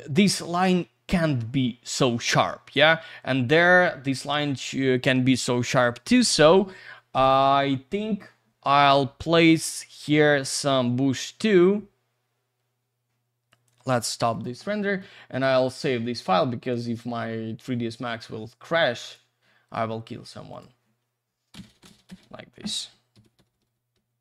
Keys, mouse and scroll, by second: 5.5 click, 7.2 click, 10.1 click, 13.5 click, 14.3 click, 14.8 middle click, 16.2 click, 23.5 typing.